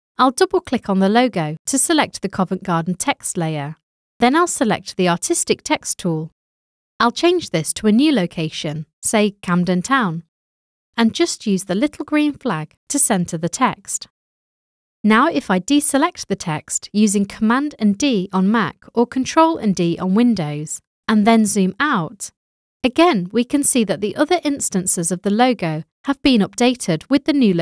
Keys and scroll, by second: 8.8-11.0 typing, 17.5 super+d.